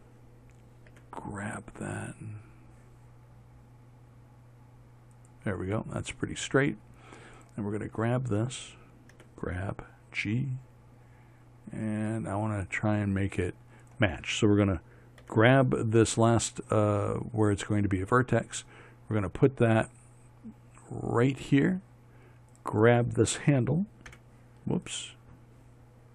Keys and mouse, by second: 1.4 g, 7.8-9.6 right drag, 9.6 g, 15.7 g, 23.0-26.1 right drag, 24.6 h.